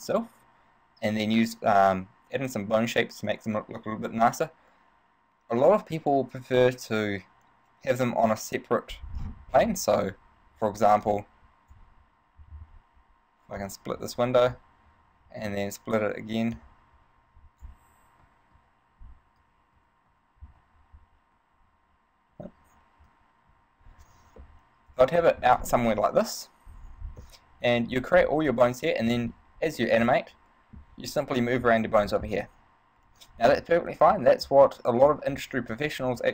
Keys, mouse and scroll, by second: 9.4-10.6 scroll down 8, 11.2 click, 13.8 click, 26.4 middle click, 26.4 KP_1, 30.1 middle click, 30.1 scroll up 1, 35.0 click.